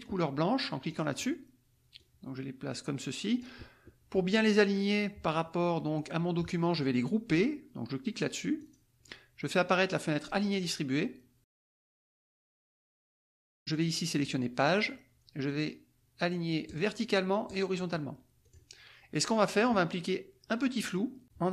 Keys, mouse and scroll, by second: 0.9 click, 2.0-3.6 drag, 8.6 click, 10.5 click, 12.6 click, 14.8 click, 16.7 click, 17.5 click, 18.4 click, 20.8 click.